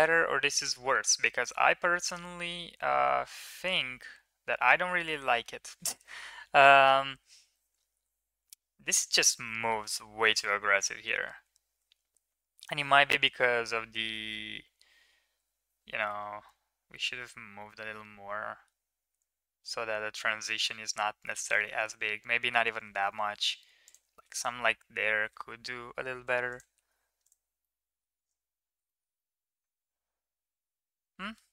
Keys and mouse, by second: 0.3-5.2 middle drag, 6.4 KP_1, 7.7 ctrl+KP_3, 10.2 ctrl+z, 10.6 ctrl+z, 10.9 ctrl+z, 11.4 ctrl+z, 14.0 g, 24.2 Tab, 24.8 Tab, 25.8 alt+h, 26.3 click, 26.7 Tab, 27.0 middle click, 27.4-27.9 middle drag, 28.7 shift+middle drag, 29.0-31.2 middle drag.